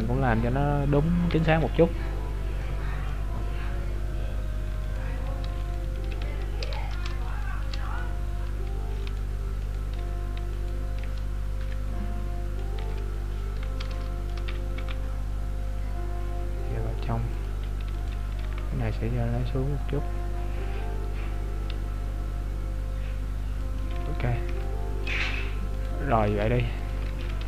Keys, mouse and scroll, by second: 1.4 KP_3, 2.0-2.3 scroll up 4, 2.7 middle click, 2.7-3.1 scroll up 1, 3.3-4.4 scroll down 3, 4.4 scroll down 3, 4.9 alt+right click, 5.7 alt+right click, 6.2 z, 7.4 alt+shift+right click, 7.6 alt+shift+right click, 7.9 right click, 8.2-8.8 scroll up 1, 9.1 alt+right click, 9.1 scroll up 2, 10.6 alt+right click, 11.3-11.7 scroll down 5, 11.7 middle click, 12.8 KP_3, 13.4 scroll up 2, 14.0 shift+middle click, 14.0 scroll up 6, 14.9 g, 18.0 alt+right click, 18.4 g, 25.8 right click, 27.2 ctrl+z.